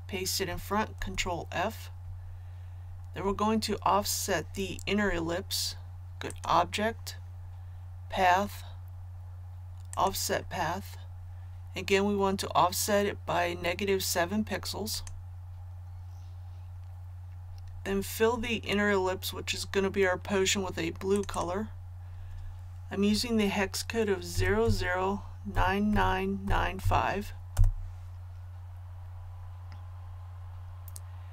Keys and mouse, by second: 0.9 ctrl+f, 6.3 click, 24.3 KP_0, 25.5 KP_9, 26.8 KP_5.